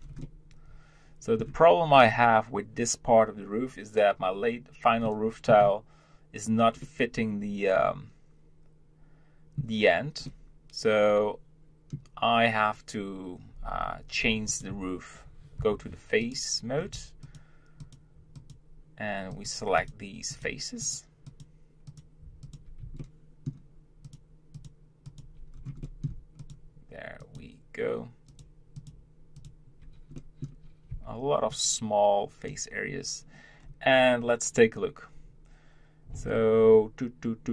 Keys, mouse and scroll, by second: 0.0 scroll down 1, 0.2-3.5 middle drag, 5.0 middle click, 5.5-7.0 scroll, 7.0-9.8 middle drag, 10.2-13.2 middle drag, 14.3 Tab, 14.5 click, 14.7 Tab, 15.6 3, 16.2 click, 16.8 scroll down 2, 17.3 shift+click, 17.8 shift+click, 18.3 shift+click, 19.3 shift+click, 19.8 shift+click, 20.3 shift+click, 20.8 shift+click, 21.3 shift+click, 21.9 shift+click, 22.4 shift+click, 23.0-24.0 shift+middle drag, 24.0 shift+click, 24.5 shift+click, 25.0 shift+click, 25.5 scroll down 1, 25.8 middle click, 26.4 shift+click, 27.2 shift+click, 28.3 shift+click, 28.8 shift+click, 29.3 shift+click, 30.1 middle click, 30.9 b, 33.6 scroll down 2.